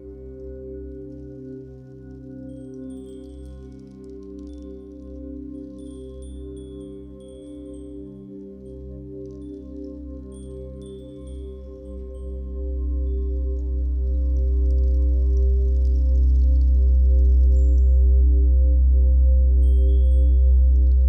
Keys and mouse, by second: 1.8-3.2 shift+drag, 3.5 shift+click, 3.8 shift+click, 4.1 shift+click, 4.5 shift+click, 4.8 shift+click, 5.2 shift+click, 5.6 shift+click, 6.3-7.3 shift+drag, 7.1 a, 7.4 z, 10.1-10.9 drag, 10.6 typing, 12.1 ctrl+i, 13.2 Return, 17.4 click, 18.3 shift+click, 19.3 ctrl+i, 20.4 Return.